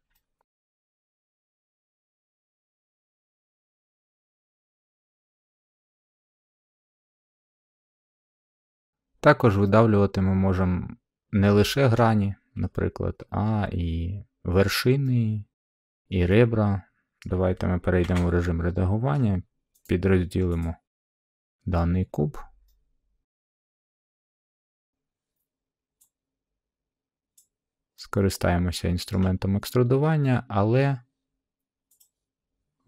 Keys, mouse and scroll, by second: 1.3 click, 3.7 middle click, 4.2 middle click, 4.2 middle click, 4.9 middle click, 6.1 middle click, 6.2 middle click, 6.3 middle click, 6.8 middle click, 9.2 middle click, 9.3 middle click, 10.2 scroll, 11.8-13.0 middle drag, 15.6-16.7 middle drag, 17.1-18.3 middle drag, 18.0 Tab, 19.1-19.8 middle drag, 19.8 right click, 19.8 scroll, 20.5 click, 21.7 middle click, 22.1 middle click, 22.6-23.0 scroll, 23.0 middle click, 24.5-25.6 middle drag, 27.3 click, 29.0-30.2 middle drag, 31.9-32.8 drag.